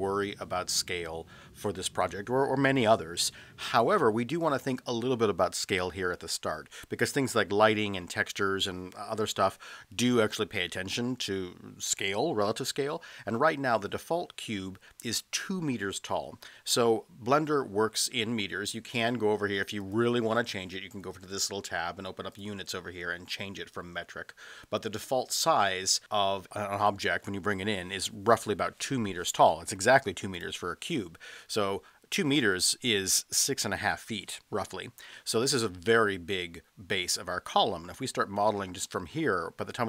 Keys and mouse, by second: 19.8 click, 22.4 click.